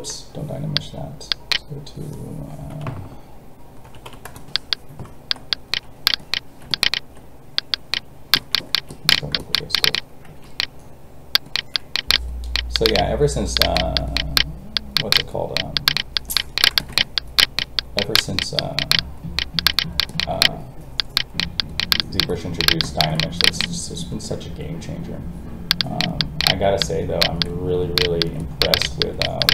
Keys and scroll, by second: 10.2 alt+a, 24.4 alt+a.